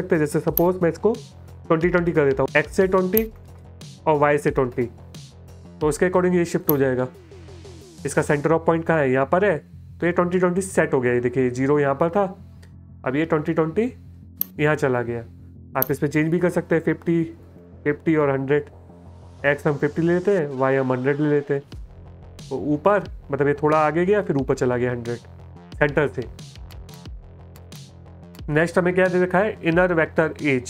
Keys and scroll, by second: 0.9-4.5 typing, 16.0-18.2 typing, 18.9 Tab, 19.8 KP_1, 20.1 KP_0, 22.8 space, 25.5 space, 26.4 space.